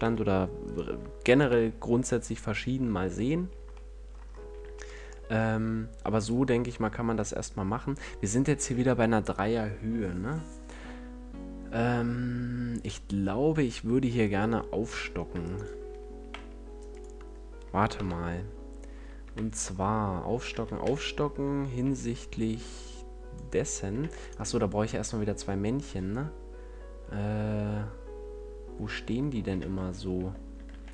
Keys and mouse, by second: 0.0 F11, 0.6 middle click, 1.4 KP_Decimal, 3.4 a, 12.9-14.2 right drag, 14.2 Tab, 16.2 x, 17.2 middle click, 17.9 KP_1, 19.2 KP_5, 20.8 z, 21.8 b, 24.0 Tab, 29.6 Tab, 30.1 Tab, 30.6 shift+d.